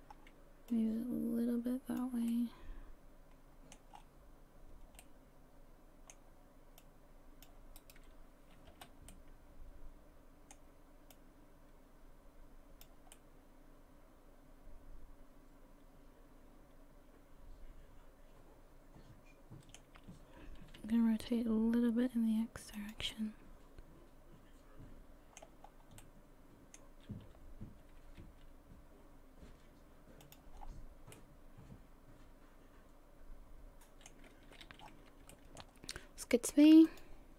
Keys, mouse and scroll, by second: 0.1-0.6 scroll up 1, 0.7 click, 2.4 middle click, 3.9-4.6 scroll up 5, 4.6-5.0 scroll down 1, 5.0 middle click, 6.8 click, 7.8 right click, 8.7 l, 9.1 middle click, 11.1 click, 13.1 middle click, 17.1 middle click, 20.4 r, 23.1 middle click, 25.6-26.0 scroll down 3, 26.0 middle click, 27.8 r, 30.6-30.9 scroll down 5, 31.1 middle click, 34.4 a, 34.7 a, 34.8-35.2 scroll up 5, 35.3 shift+middle click, 36.9 click.